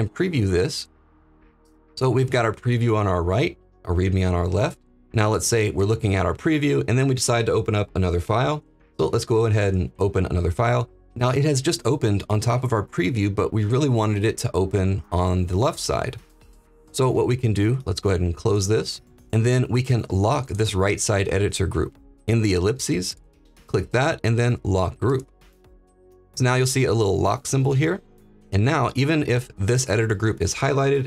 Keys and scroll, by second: 8.4 ctrl+p.